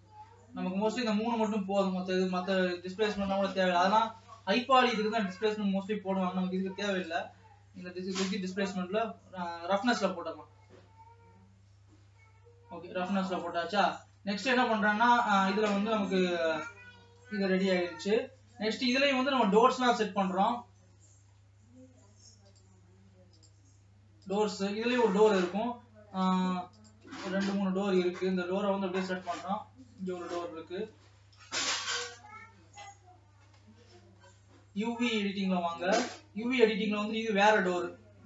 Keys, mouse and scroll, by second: 0.0-1.4 middle drag, 1.4-1.9 scroll down 2, 1.9-4.9 middle drag, 4.9 click, 5.4 middle click, 6.1-6.8 scroll up 2, 6.8-14.9 drag, 14.9-16.3 middle drag, 16.3-17.4 scroll up 8, 17.9-19.9 middle drag, 19.9 click, 20.2 scroll down 3, 21.1-22.5 shift+middle drag, 22.5 click, 23.8 Tab, 24.6 click, 27.4 middle click, 27.9-28.9 scroll down 10, 28.9-30.3 shift+middle drag, 30.3 shift+click, 30.4-31.6 middle drag, 31.6-32.0 scroll down 2, 32.0 KP_0, 36.2 click.